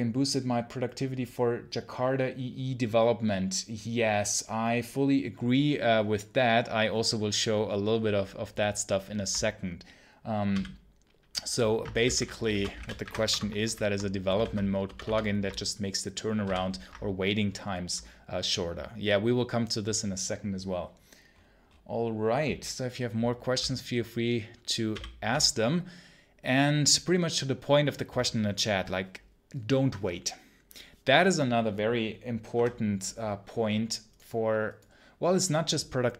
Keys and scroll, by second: 13.2 Return, 14.8 Return.